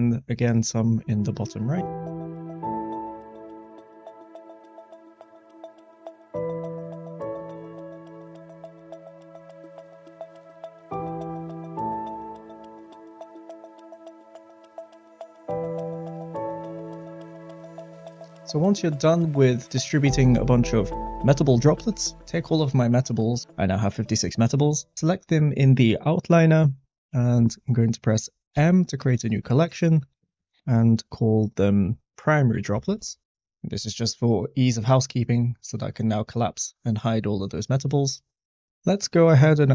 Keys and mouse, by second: 2.1-13.6 typing, 5.2 shift+middle click, 8.4 shift+middle click, 12.9 shift+middle click, 15.2 shift+middle click, 15.5-17.0 typing, 21.8 Tab, 22.1 Tab, 22.1 click, 28.5 m, 35.8 click, 38.0 click.